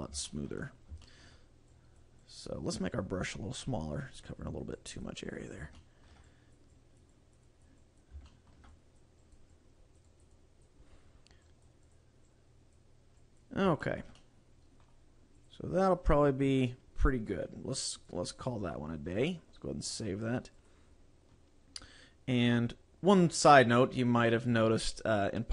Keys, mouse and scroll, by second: 0.4 shift+middle click, 0.7 scroll up 2, 1.1 shift+middle click, 1.8 click, 2.4 click, 3.6 click, 5.0 click, 5.6 click, 5.8 shift+middle click, 6.4 click, 6.9 click, 7.3 click, 7.7 click, 8.0 click, 8.4 shift+middle click, 8.9 click, 9.4 click, 9.8 click, 10.3 click, 10.4 click, 11.0-11.6 scroll down 2, 11.6 click, 12.1 click, 12.4 click, 13.4 click, 13.9 shift+middle click, 14.2 middle click, 14.8 middle click, 15.5 click, 16.0 click, 18.0 click, 18.6 click, 20.0 click.